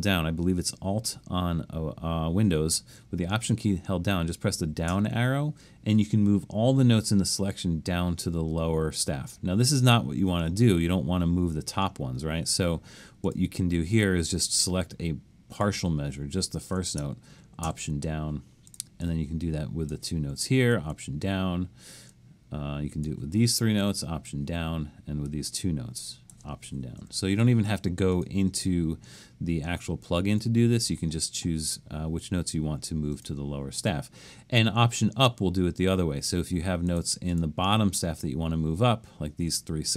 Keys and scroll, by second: 4.9 alt+Down, 12.4 super+z, 17.6 alt+Down, 20.6 alt+Down, 23.8 alt+Down, 27.0 alt+Down.